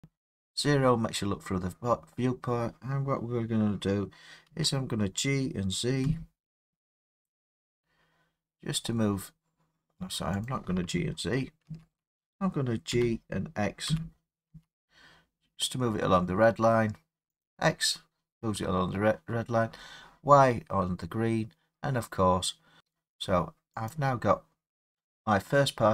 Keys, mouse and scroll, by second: 0.0-3.1 middle drag, 0.0 click, 0.0 0, 4.5 g, 6.1 z, 10.5 click, 11.7 ctrl+z, 12.9 g, 13.9 z, 14.5 x, 17.5 click, 24.0 click.